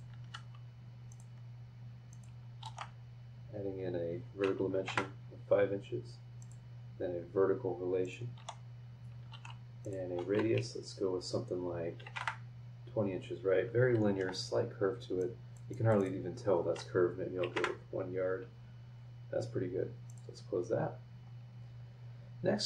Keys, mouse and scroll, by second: 0.2 Escape, 1.1 click, 2.1 click, 2.6 shift+v, 4.7 KP_5, 4.9 KP_Enter, 6.4 click, 8.0 click, 8.3 v, 9.3 shift+r, 9.8 shift+click, 12.0 KP_2, 12.0 KP_0, 12.2 KP_Enter, 14.0 Escape, 15.2 click, 17.4 KP_1, 17.6 KP_Enter, 20.1 click, 21.5 scroll up 2.